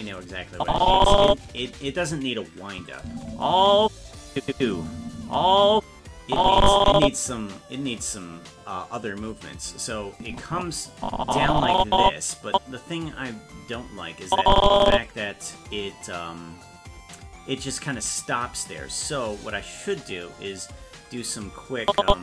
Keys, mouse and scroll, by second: 0.5 click, 2.7 click, 3.0 space, 4.3 click, 4.5 space, 6.3 click, 10.2-12.5 drag, 14.3 click, 21.8 click.